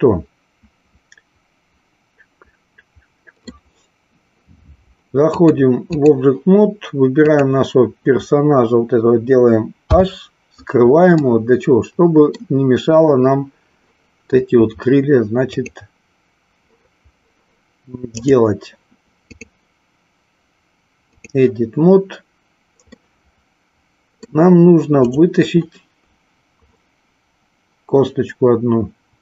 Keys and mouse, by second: 5.2 click, 7.2 click, 9.8 h, 11.3-12.3 middle drag, 15.6 click, 18.3 click, 19.2-21.4 drag, 22.9-24.4 middle drag, 24.9 click.